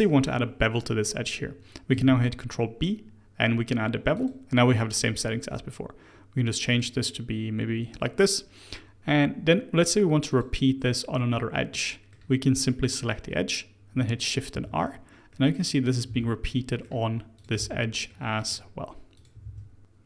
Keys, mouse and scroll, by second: 1.9 ctrl+b, 6.6-9.7 drag, 10.3 click, 11.3-12.8 middle drag, 12.8 click, 14.5 shift+r, 15.3-15.8 middle drag, 15.8 click, 16.0 shift+r, 16.4-17.3 middle drag, 17.3 click, 17.6 shift+r, 18.0-19.1 middle drag, 19.1 click, 19.4 shift+r, 19.8-20.0 middle drag.